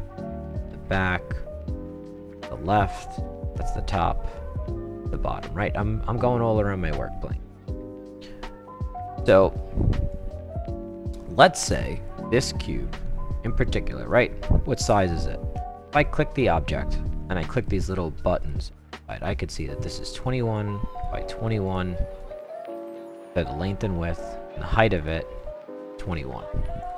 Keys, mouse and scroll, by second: 0.3-1.1 right drag, 2.5-3.9 right drag, 4.5-9.0 right drag, 9.4-10.1 right drag, 10.4 middle click, 10.6 middle click, 10.8 middle click, 11.2 middle click, 11.6 middle click, 12.1-13.4 right drag, 14.1 click, 16.3 click, 18.4 click, 20.5-21.0 right drag, 21.7 click, 25.0 click, 26.8 click.